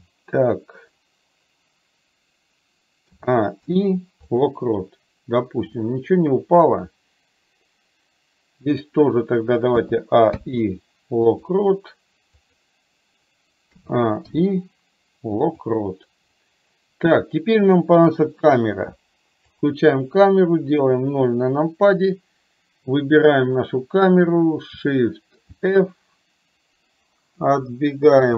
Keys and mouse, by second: 5.8-9.0 drag, 12.5 click, 20.8 KP_0, 23.5 click, 25.5 shift+f.